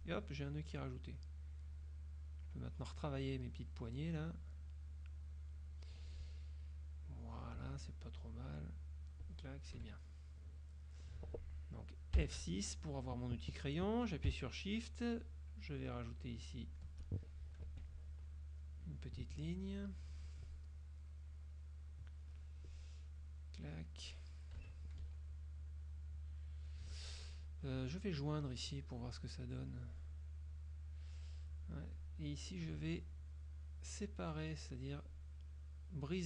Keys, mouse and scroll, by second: 0.1 ctrl+alt+click, 0.6 ctrl+alt+click, 1.9 click, 3.6 click, 5.0 click, 7.6 click, 7.9 F2, 8.4 click, 9.9 KP_Subtract, 10.6 click, 12.3 F6, 15.3-17.1 shift+drag, 17.8 F2, 18.4 click, 21.4 click, 23.3 click, 24.4 click, 24.6 KP_Subtract, 25.1 F1, 25.6 click, 26.4 click, 27.0 F2, 27.8 click, 29.6 click, 32.0 click.